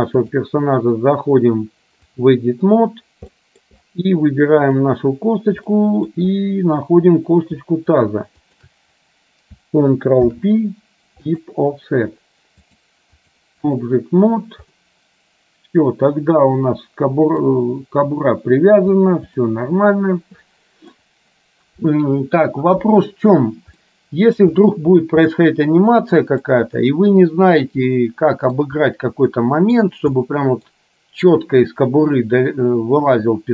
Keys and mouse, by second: 0.3-2.4 drag, 3.6 middle click, 4.7 click, 5.8 middle click, 8.6 shift+click, 10.3 ctrl+p, 12.8 click, 13.3 click, 14.9-17.6 middle drag, 18.2 middle click, 19.4-20.9 middle drag, 23.9 middle click, 25.4-26.6 middle drag, 28.1 middle click, 29.4 middle click, 30.3 middle click, 32.3-33.5 middle drag.